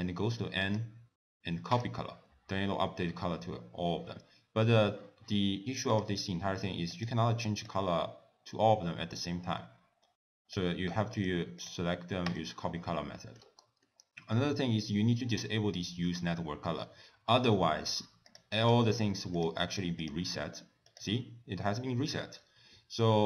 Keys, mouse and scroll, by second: 0.7 click, 6.0 click, 7.0 click, 11.6 click, 13.2 middle click, 13.5-14.6 scroll up 3, 13.9 middle click, 18.3 click, 18.7 click, 19.4 click, 20.1 click, 21.0 click, 22.4-22.8 scroll down 2.